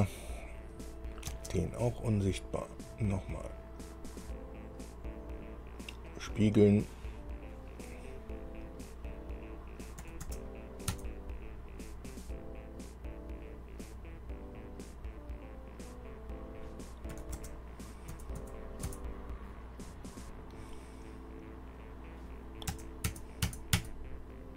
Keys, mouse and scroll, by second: 0.9 click, 1.5 space, 2.5 click, 6.3 click, 10.3 KP_9, 10.5 KP_0, 11.1 KP_Enter, 17.3 KP_9, 17.6 KP_0, 18.3 KP_Enter, 18.6 KP_Enter, 19.1 KP_Enter, 22.9 KP_0, 23.3 KP_Enter, 24.0 KP_Enter.